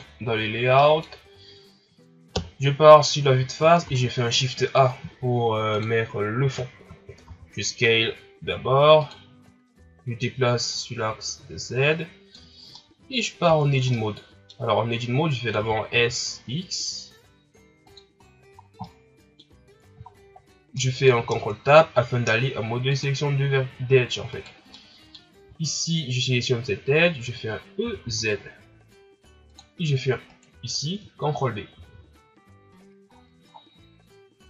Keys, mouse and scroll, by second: 0.0 click, 0.5 scroll down 4, 0.7-2.3 middle drag, 2.3 KP_1, 5.8 shift+a, 7.2 s, 10.7-12.5 drag, 12.5 scroll down 2, 12.8 middle click, 13.4 Tab, 13.9-15.5 middle drag, 15.5 s, 18.3-18.8 scroll down 4, 18.8-20.1 middle drag, 20.1 shift+scroll down 1, 20.8-23.0 middle drag, 23.0 ctrl+Tab, 24.3 right click, 24.7 middle click, 25.5-26.2 shift+scroll up 4, 27.8 e, 30.3 right click, 31.8 ctrl+b.